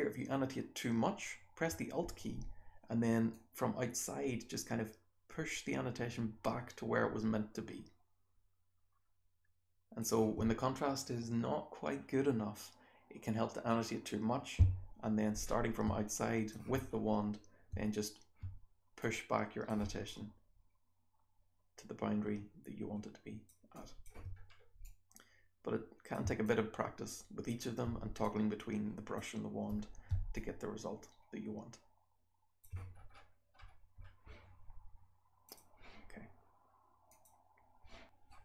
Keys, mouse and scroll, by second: 0.8-1.6 scroll down 1, 1.6-2.1 alt+scroll down 1, 2.1-3.2 alt+scroll down 1, 3.2-9.9 alt+drag, 3.2-4.8 alt+scroll down 1, 4.8-6.1 alt+scroll down 1, 6.1-7.5 alt+scroll down 1, 7.5-8.8 alt+scroll down 1, 8.8-9.9 alt+scroll down 1, 9.9-11.5 alt+scroll down 1, 11.5-12.8 scroll down 1, 12.8-14.1 scroll down 1, 14.1-15.4 scroll down 1, 15.4-15.8 scroll up 1, 16.0-16.4 alt+drag, 16.8-17.6 scroll down 1, 17.6-18.3 alt+scroll down 1, 18.3-18.9 scroll down 1, 18.9 click, 20.0-23.4 alt+drag, 23.7 alt+click, 24.0-24.3 alt+scroll down 1, 24.3-24.8 scroll up 1, 24.8-26.0 drag, 26.4-27.5 alt+drag, 28.2 click, 28.2-28.8 scroll up 1, 28.8-29.6 scroll up 1, 29.6-30.3 scroll up 1, 29.6 b, 30.3-32.5 alt+drag, 32.5 alt+scroll up 2, 32.8-33.4 scroll down 2, 33.4 scroll up 1, 33.6-33.9 scroll down 1, 33.9-35.4 scroll up 1, 35.4 click, 35.4 scroll up 1.